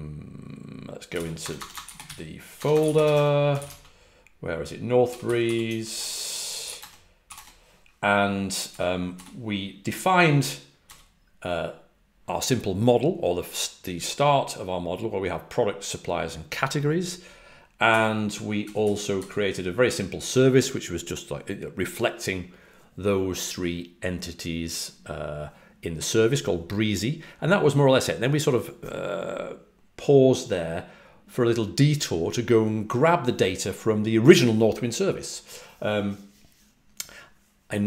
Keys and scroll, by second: 1.1-9.6 typing, 10.8 typing, 17.8-19.1 typing.